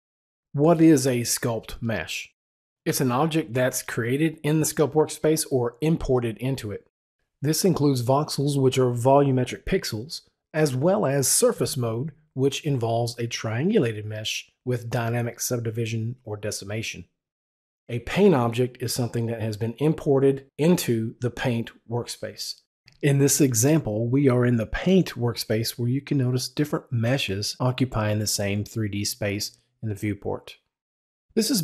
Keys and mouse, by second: 18.5 click.